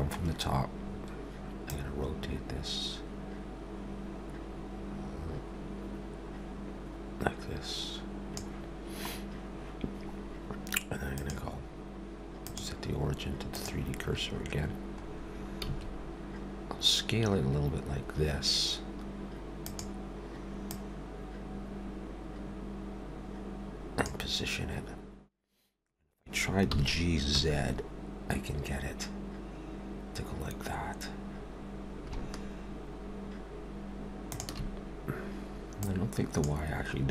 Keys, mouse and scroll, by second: 0.9-1.7 scroll down 1, 1.7 click, 1.7 scroll down 1, 11.1 click, 14.1-15.0 scroll up 3, 15.0-15.6 scroll down 2, 15.6 s, 20.7 click, 26.7 g, 35.8 click.